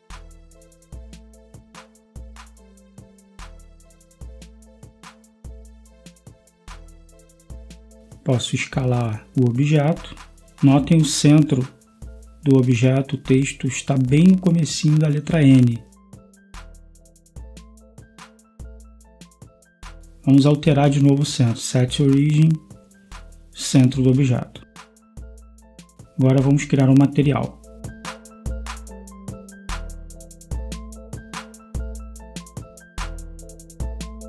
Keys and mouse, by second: 5.1-9.3 drag, 9.3 s, 12.3 g, 32.8 BackSpace.